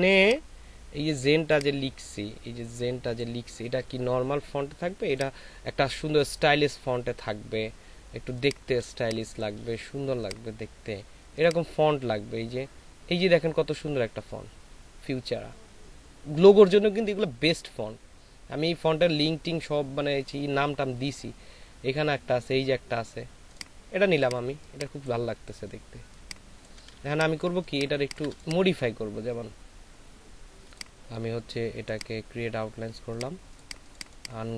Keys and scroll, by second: 9.0 space, 26.9 ctrl+shift+space, 27.8 ctrl+a.